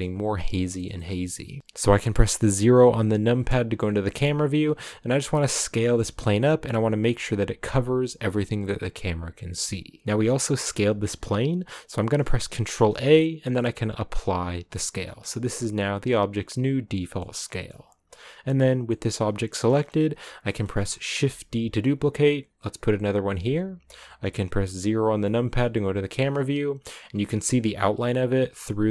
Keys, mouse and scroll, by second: 1.6 KP_0, 3.3 KP_0, 4.3 scroll down 1, 4.6 s, 5.6 s, 14.7 ctrl+a, 15.7 scroll down 2, 16.0-17.2 middle drag, 17.2 scroll down 1, 17.4-19.8 middle drag, 19.8-20.4 scroll up 2, 19.9 shift+middle click, 20.4 middle click, 20.8 scroll down 1, 21.2 shift+d, 25.0 KP_0, 26.0-26.8 scroll up 2, 26.8-28.9 scroll up 1.